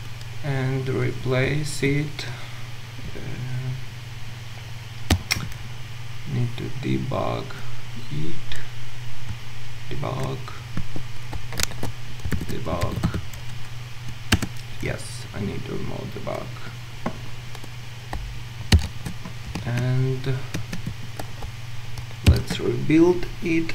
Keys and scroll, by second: 11.7 ctrl+shift+super+a, 14.4 shift+F9, 18.7 ctrl+shift+super+F12, 22.3 ctrl+shift+super+F12, 22.3 ctrl+shift+super+F9.